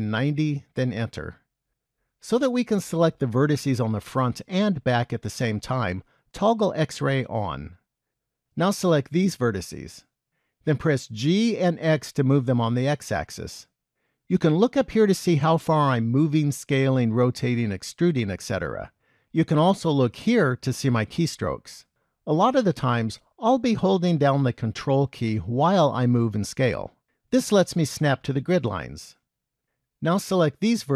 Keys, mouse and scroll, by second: 7.1 click, 8.9 click, 11.2 g.